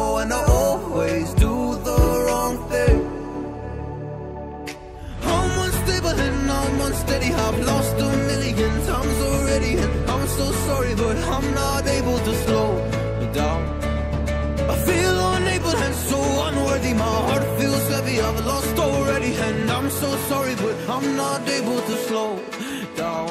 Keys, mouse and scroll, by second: 6.0 scroll up 1, 6.7 click, 8.5 scroll down 1, 9.6 click, 11.2 click, 11.8 scroll down 1, 12.6-13.7 scroll up 1, 13.7 click, 14.1 scroll down 1, 14.7 scroll up 1, 16.3 click, 18.1 scroll down 1, 19.5 scroll up 1, 19.8 click, 23.1 Delete.